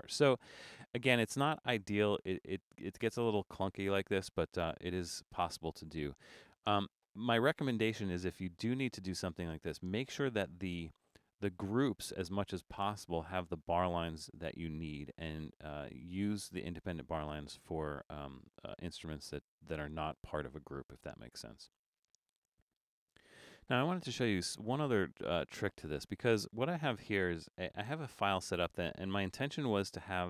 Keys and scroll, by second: 11.9 BackSpace, 28.5 super+=.